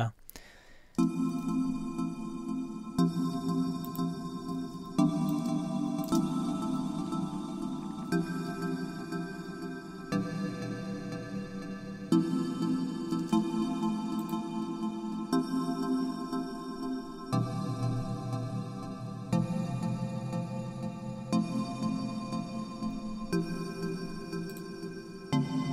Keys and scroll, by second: 0.9 space, 3.3 b, 4.6 super+z, 5.4 super+space, 13.1 space.